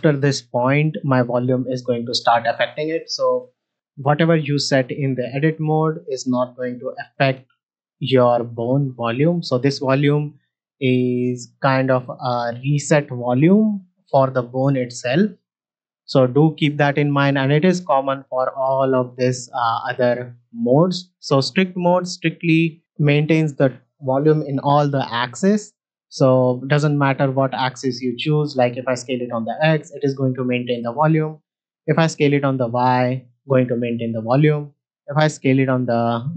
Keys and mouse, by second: 3.1 Tab, 5.8-7.3 drag, 7.9 Tab, 16.0-16.3 shift+middle drag, 18.0-19.8 drag, 21.4 shift+middle drag, 21.8 ctrl+middle click, 24.9 s, 27.7 right click, 28.4 s, 28.5 x, 31.8 s, 31.9 y, 35.1 s, 35.3 z.